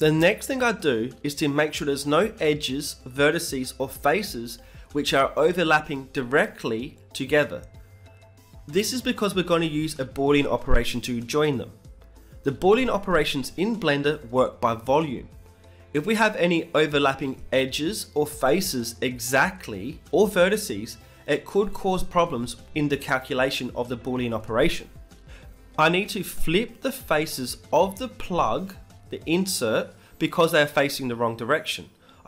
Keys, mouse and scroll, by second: 0.6 KP_3, 0.9 z, 1.2-3.3 middle drag, 2.5 g, 4.3 g, 5.5 middle click, 6.3 Tab, 6.6 right click, 7.2-8.3 middle drag, 7.8 Tab, 8.3 right click, 8.3 a, 8.5 middle click, 8.8 e, 9.1 g, 12.2 Tab, 13.1 KP_3, 14.0-16.0 middle drag, 14.5 g, 16.3-19.0 right drag, 17.0 Tab, 17.5 b, 18.8 g, 22.0 Tab, 22.4 middle click, 22.6 z, 23.9 Tab, 24.4 a, 24.5-31.2 middle drag, 24.5 a, 31.7 ctrl+n.